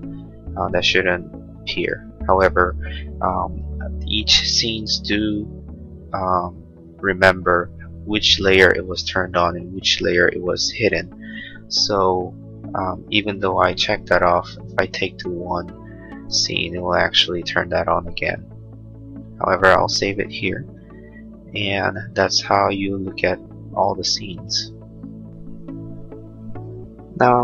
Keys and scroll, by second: 20.7 ctrl+s.